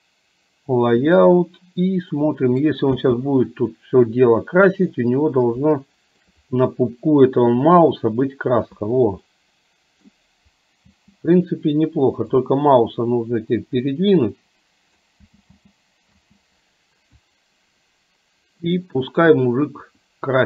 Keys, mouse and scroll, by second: 2.4 middle click, 3.1 space, 6.0-6.5 shift+middle drag, 9.5-10.2 middle drag, 11.1 space, 12.6-15.2 drag, 15.5 space, 15.7 space, 16.2 space.